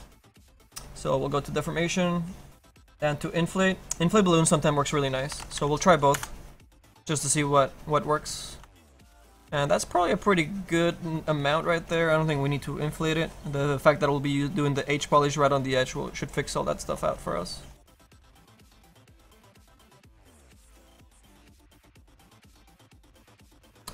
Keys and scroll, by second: 4.8 KP_5, 5.2 KP_5, 5.5 KP_5.